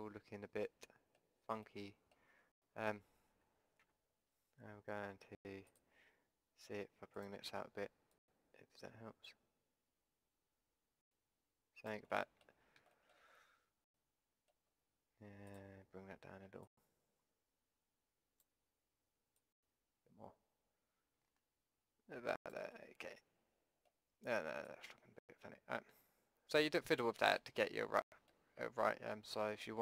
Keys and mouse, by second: 3.9 Tab, 5.7-7.5 drag, 12.1-14.3 middle drag, 15.5-18.8 drag, 18.8 middle click, 19.5-21.5 drag, 21.5-22.7 middle drag, 24.7-26.7 drag, 26.7 middle click, 27.3-29.8 drag.